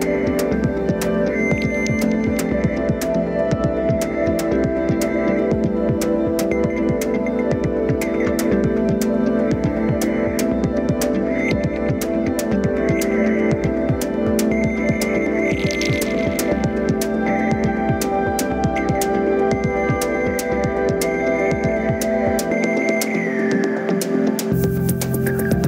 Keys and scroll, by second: 1.4 ctrl+d, 18.5 ctrl+d.